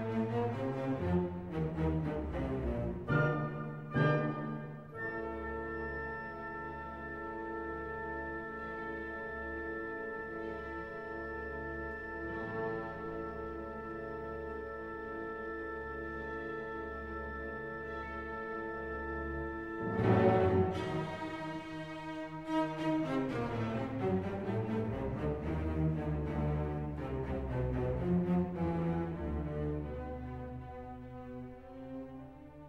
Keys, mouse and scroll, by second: 0.3-1.7 middle drag, 1.7 click, 4.3-14.0 drag, 27.8 click, 28.8 click, 31.6-32.0 scroll up 1.